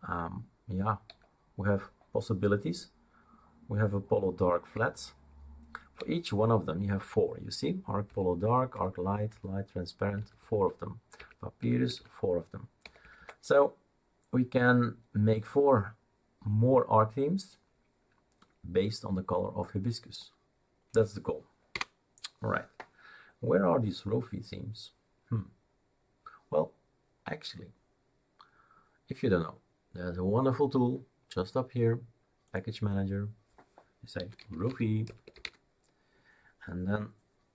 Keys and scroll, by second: 5.9 Down, 8.7 Down, 9.3 Down, 10.1 Up, 10.3 Up, 10.5 Up, 11.1 Up, 11.6 Up, 12.8 Down, 13.0 Down, 13.1 Down, 21.7 Escape, 34.1-35.9 typing.